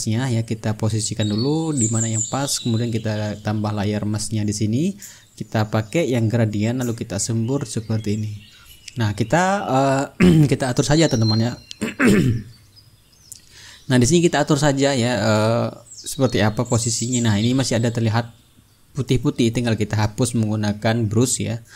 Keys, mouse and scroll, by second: 4.0 click, 5.0 click, 6.5 click, 7.6-15.2 drag, 16.0 click, 17.3 ctrl+click, 17.7 click, 18.9 click, 20.5 click, 21.3 ctrl+z.